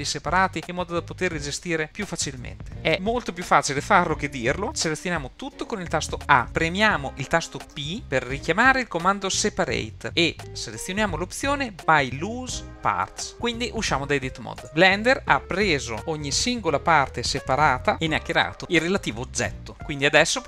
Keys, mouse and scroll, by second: 2.7-3.9 scroll down 2, 4.6-13.3 shift+middle drag, 14.6 Tab, 20.2-20.4 middle drag.